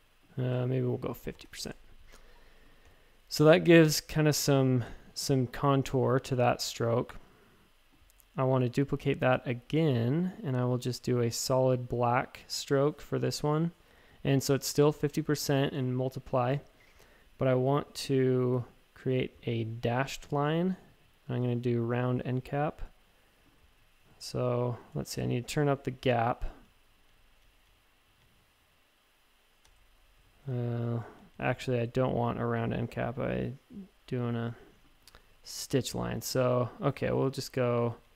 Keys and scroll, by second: 1.1-1.9 typing, 5.6-6.3 typing, 9.4-10.2 typing, 24.9 typing, 25.7 Page_Up, 26.0 Page_Up, 26.6 Page_Up, 27.0 Page_Up, 30.2 shift+Tab, 30.8 Page_Down, 31.0 Page_Down, 31.1 Down, 31.3 Down, 35.4 Up, 35.6 Up, 35.7 Up, 36.5 Page_Down, 37.1 Tab, 37.7 Down, 37.9 Page_Down, 38.0 Page_Down, 38.1 Down.